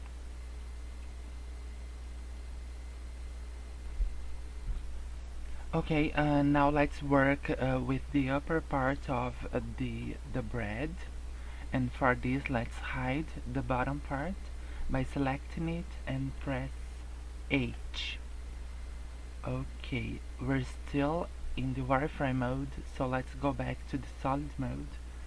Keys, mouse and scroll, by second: 15.0 click, 17.5 h, 18.9 scroll up 2, 19.3-19.6 scroll down 3, 19.6 scroll up 2, 20.6 click.